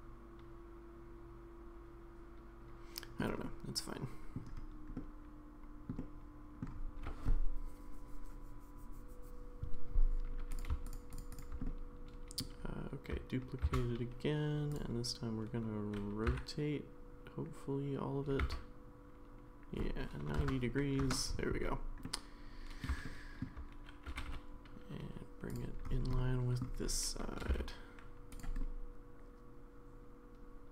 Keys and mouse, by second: 3.4-4.4 middle drag, 4.9-5.9 middle drag, 6.0-6.6 middle drag, 10.8 shift+click, 11.6-12.4 middle drag, 13.7 shift+d, 16.3 r, 22.0 middle click, 23.0 shift+middle click, 24.1 g, 26.2 middle click, 27.4 g, 28.6-30.7 middle drag.